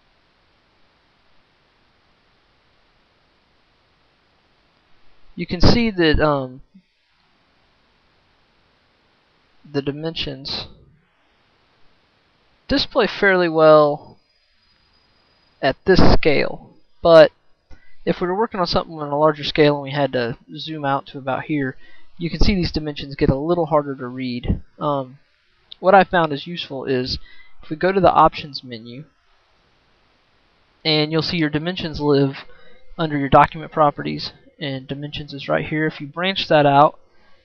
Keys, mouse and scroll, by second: 3.7-6.2 right drag, 24.8 right click, 25.1 right click, 27.5-37.4 right drag.